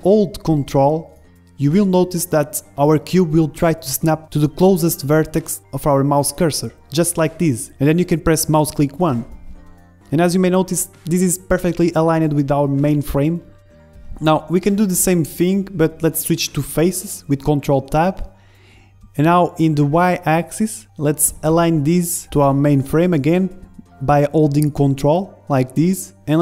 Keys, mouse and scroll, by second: 10.2-11.7 middle drag, 12.5 Tab, 13.7 ctrl+Tab, 15.3 a, 16.3 middle click, 18.0 ctrl+Tab, 19.6-21.3 right drag, 21.1 click, 21.6-22.9 drag, 26.1-26.4 middle drag.